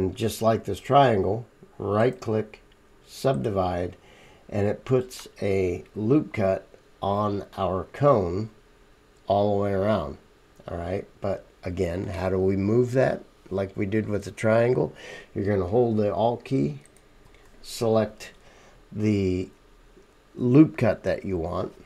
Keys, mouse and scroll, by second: 6.7-10.6 middle drag, 7.9-9.2 right drag, 9.6-16.9 right drag, 11.1-16.9 middle drag, 16.8 alt+click.